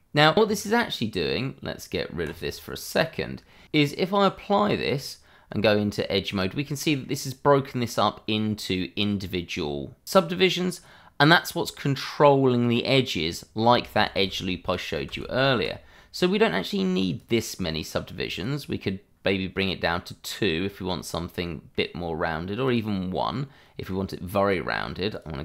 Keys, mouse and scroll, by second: 0.1 scroll up 1, 0.3 click, 2.2 click, 3.6 Tab, 4.1 click, 5.4 Tab, 6.7 middle click, 8.4 scroll up 1, 10.9-12.3 scroll up 1, 12.3 scroll down 1, 12.9 middle click, 13.9 ctrl+z, 15.0 ctrl+z, 17.1 click, 20.5-20.9 scroll down 1, 20.9 middle click, 22.6 click, 23.2-23.6 scroll up 1, 23.6 middle click, 25.1 click.